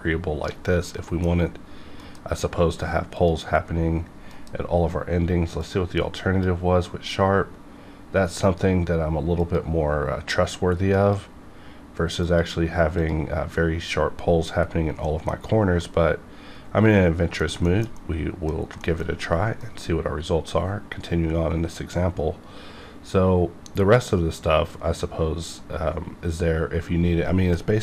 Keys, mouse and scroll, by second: 1.0 middle click, 1.5 scroll up 1, 2.0 F9, 3.2 click, 4.3 F9, 5.6 click, 9.4 click, 15.0 middle click, 15.8-17.4 middle drag, 17.4 scroll down 1, 17.6 shift+middle click, 18.5 scroll down 1, 18.8 shift+middle click, 19.1-19.6 scroll down 1, 19.6 F9.